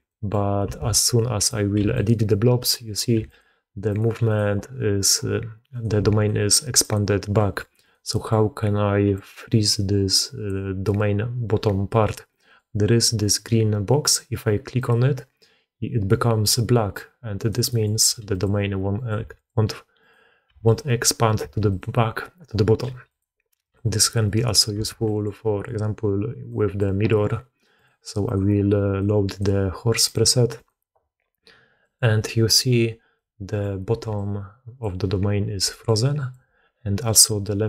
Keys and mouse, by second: 0.0 drag, 0.0 right drag, 0.7 alt+a, 1.3 click, 1.7 g, 2.5 click, 3.0 g, 3.9-4.3 drag, 4.8-5.7 drag, 5.8 s, 7.3 drag, 7.7 click, 8.0 click, 9.1-10.4 drag, 12.2-12.5 drag, 14.7 click, 17.2 click, 17.9 g, 18.8 click, 19.0 g, 19.9-21.3 drag, 21.3 g, 22.7 g, 24.1 click, 24.8 alt+a, 24.9 drag, 26.5 click, 28.1-29.3 drag, 30.5-31.2 drag, 31.7 drag, 33.0-33.5 drag, 33.9-37.6 typing, 34.0 click, 35.7 click, 36.9 click.